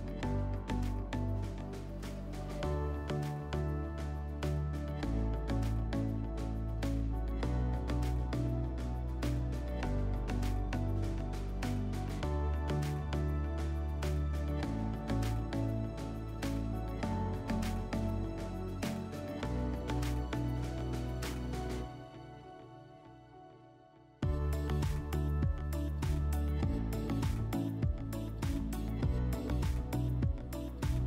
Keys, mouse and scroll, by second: 2.3 click, 3.3 click, 4.7 click, 5.9 click, 10.2-11.7 drag, 13.9 click, 17.0-18.6 drag, 19.5 click, 26.3 click, 27.9 click, 29.0-30.6 drag.